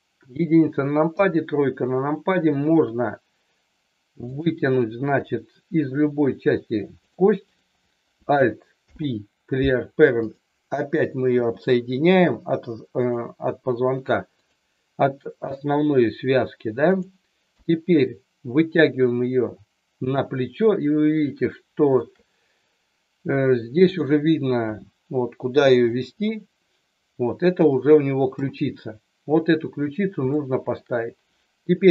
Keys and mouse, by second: 1.1 KP_3, 4.2 click, 5.2 e, 7.0 click, 7.5 click, 8.9 alt+p, 11.3 g, 12.9 click, 14.2 click, 16.8 click, 17.4 KP_1, 18.7-20.1 drag, 21.5 shift+middle click, 23.8 click, 24.6 g, 28.2 KP_3, 30.4 shift+middle click.